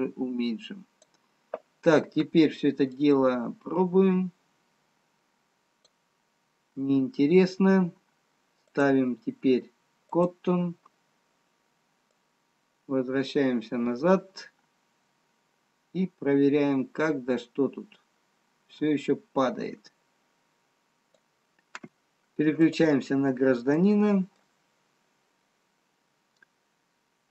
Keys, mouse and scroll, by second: 3.5 click, 8.4-9.1 scroll up 7, 9.1 click, 24.4 click, 24.4 middle click.